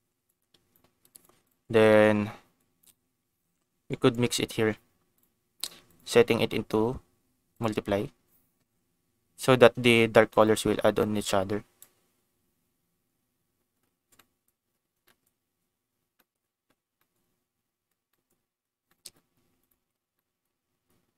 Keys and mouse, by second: 0.2 click, 1.0 click, 1.4 click, 1.8 middle click, 2.5 click, 4.0 ctrl+shift+click, 5.1 click, 6.1-7.7 drag, 11.1 click, 14.1 click, 15.0 click, 16.1 click, 17.0 click, 18.1 click, 18.9 click, 19.6 ctrl+shift+click, 20.1 middle click.